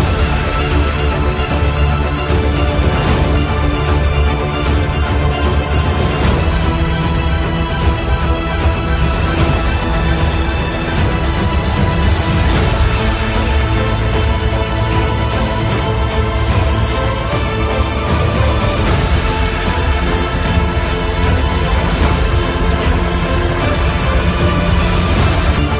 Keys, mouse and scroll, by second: 14.9 click, 16.8 r.